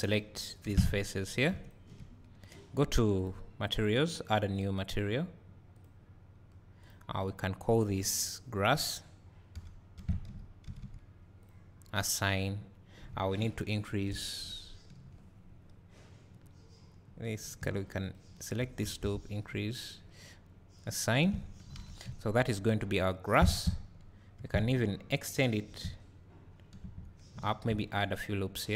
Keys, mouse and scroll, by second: 0.7 3, 0.8 click, 3.6 click, 8.4 click, 8.9-11.5 drag, 11.4 s, 12.1-18.1 drag, 14.2 ctrl+KP_Add, 19.1 ctrl+KP_Add, 20.9-22.0 drag, 21.2 Tab, 22.0 `, 22.4 click, 23.5 Tab, 23.9 scroll up 1, 24.4 2, 27.5 ctrl+r.